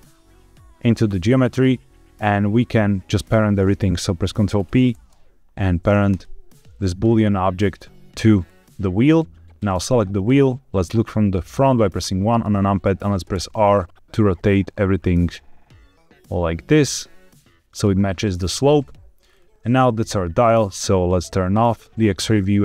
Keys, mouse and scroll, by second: 1.1-2.2 middle drag, 4.7 ctrl+p, 9.5 click, 11.5 KP_1, 13.3 r, 17.7 click, 18.4-19.1 middle drag, 19.2 scroll down 3, 19.5 z, 21.5 click, 22.5 s.